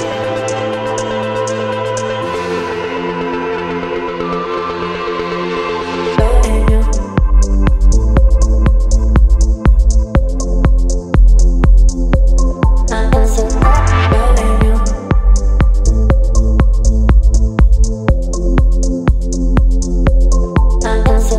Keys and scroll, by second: 1.2 Return, 1.6 Down, 1.7 Down, 2.5 space, 5.1-6.5 typing, 15.8 space, 16.4 ctrl+space, 16.6 ctrl+t, 18.4 ctrl+z, 18.8 Return, 21.1 ctrl+t.